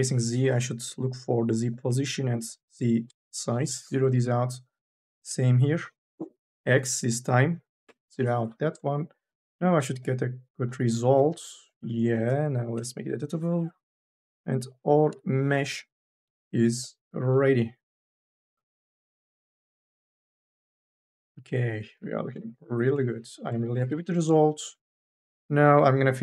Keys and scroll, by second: 1.7 KP_0, 2.9 Return, 7.5 KP_0, 7.7 Return, 12.7 c, 14.9 Delete, 15.9 n, 19.8 n, 20.2 b, 21.9 q, 23.0 q, 23.8 n.